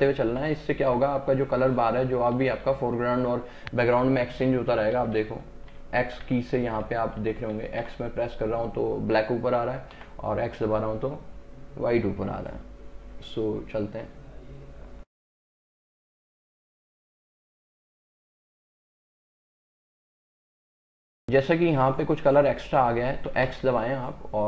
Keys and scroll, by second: 10.0 x, 18.4 space, 23.5 x.